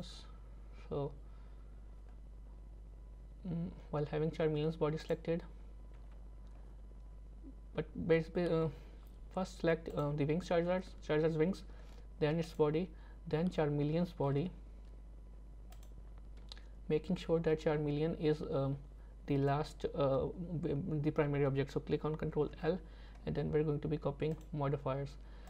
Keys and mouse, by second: 12.4 shift+click, 15.7 shift+click, 22.5 ctrl+l.